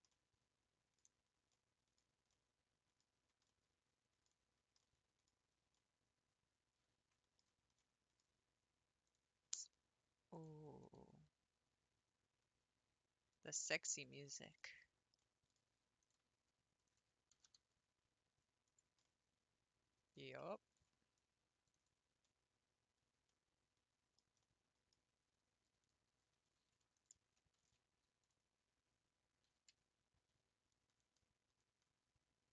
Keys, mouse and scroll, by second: 0.1-1.1 middle drag, 1.1-1.5 scroll up 4, 1.5-2.0 middle drag, 2.0 scroll down 4, 2.3 middle click, 3.2 Tab, 3.5 middle click, 4.4 Tab, 4.8 middle click, 5.3-5.7 scroll up 3, 5.8-7.7 middle drag, 7.7 Tab, 7.9-9.0 middle drag, 9.0 click, 10.3 shift+click, 10.7 g, 14.4 shift+middle click, 14.8 scroll up 3, 15.3 middle click, 16.0 click, 16.8 shift+click, 17.3 g, 19.2-20.7 middle drag, 20.7 ctrl+r, 21.2 ctrl+r, 22.2-25.2 middle drag, 25.2 scroll down 2, 26.5 3, 26.9 alt+click, 27.6 ctrl+v, 28.3 ctrl+v, 29.5 s, 29.8 s.